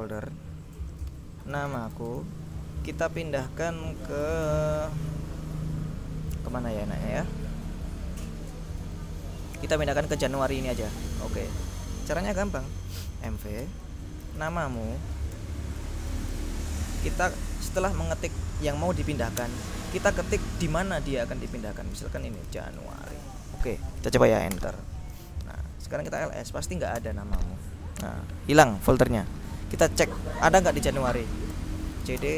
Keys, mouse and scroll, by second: 1.3-2.9 typing, 4.1-5.0 typing, 10.0 click, 11.0-12.1 drag, 13.1-16.9 typing, 19.5 space, 22.0-23.7 typing, 24.6 Return, 25.9-26.8 typing, 27.1 Return, 31.6 ctrl+l, 32.0 ctrl+c, 32.1 ctrl+d, 32.3 ctrl+space.